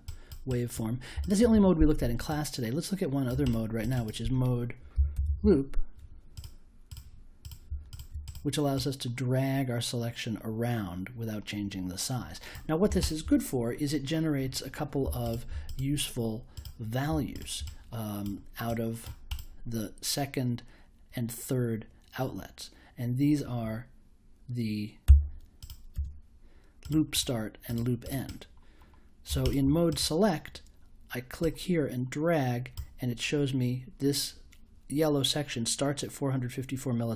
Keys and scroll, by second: 4.7-5.9 typing, 25.0 i.